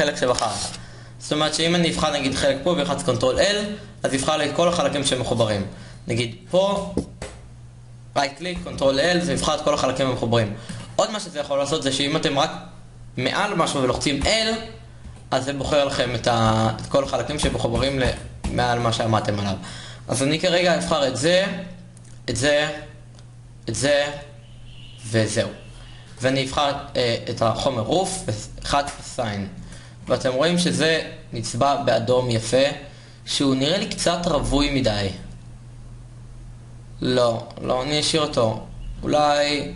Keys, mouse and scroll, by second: 3.1 a, 4.8 ctrl+l, 6.9 a, 10.1 ctrl+l, 12.2 a, 15.7-21.0 typing, 22.4 l, 23.8 l, 25.2 l, 31.2 Tab, 31.7 shift+z.